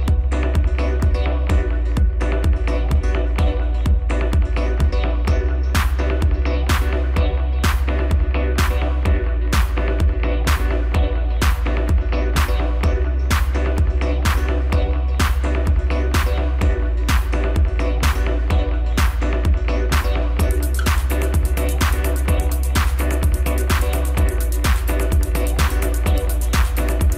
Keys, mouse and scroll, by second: 0.2 shift+d, 6.7 shift+r, 7.6 scroll down 2, 7.8-10.8 middle drag, 10.9 scroll up 2, 12.5 KP_1, 13.2 scroll up 1, 14.1 shift+click, 14.6 shift+click, 15.3 shift+drag, 15.9 shift+drag, 16.7 shift+click, 17.4 shift+drag, 18.0 shift+drag, 18.5 shift+click, 19.0 scroll down 1, 20.0 g, 22.7 scroll down 2, 23.1-25.5 middle drag, 25.5 drag, 25.8 scroll up 4, 26.4-26.7 scroll down 2.